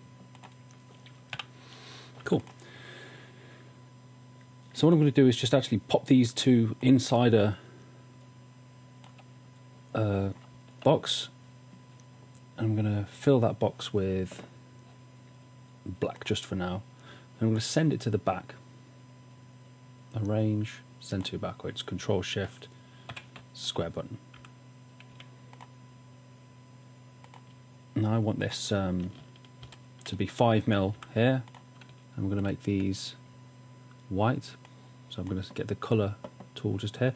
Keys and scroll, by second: 1.4-2.2 typing, 23.2 shift+super+[, 24.4-25.1 typing, 29.6 shift+Down, 30.9 shift+Down.